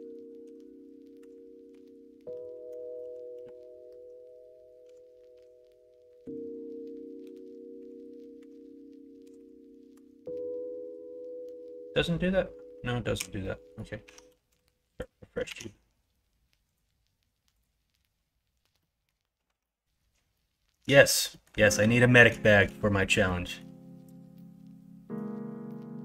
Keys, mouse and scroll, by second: 4.8 s, 13.1 x, 14.0 Tab, 14.4 x, 15.1 middle click, 15.4 shift+a, 18.8 middle click, 19.6 middle click, 20.3 shift+middle click, 22.4 shift+middle click, 23.3 middle click, 24.3 middle click, 25.7 middle click.